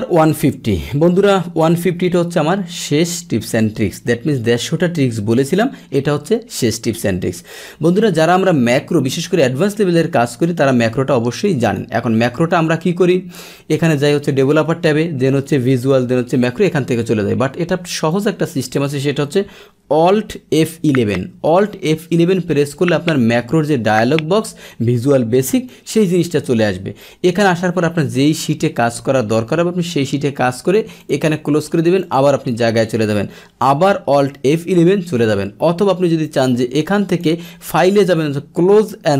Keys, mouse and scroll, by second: 7.6 scroll up 1, 8.2-8.5 scroll up 1, 9.5-9.8 scroll down 1, 10.4 click, 11.6 click, 14.2 click, 18.1 click, 18.7 click, 20.6 alt+F11, 25.6 click, 27.7 middle click, 28.2-28.5 scroll up 1, 28.8 scroll up 1, 31.0 click, 32.0 click, 34.5 alt+F11, 37.0 click.